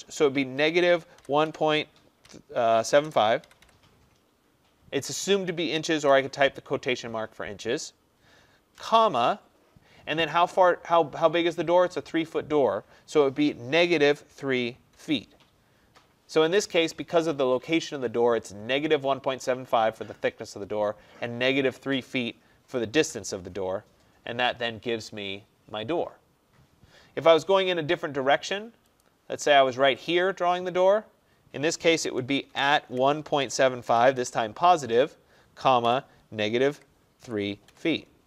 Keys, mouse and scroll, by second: 0.6-3.7 typing, 6.1 shift+', 8.9 ,, 13.8-15.0 typing, 23.1 Return, 29.1 click, 30.2 click, 32.6-34.2 typing, 35.7-37.7 typing, 37.3 click.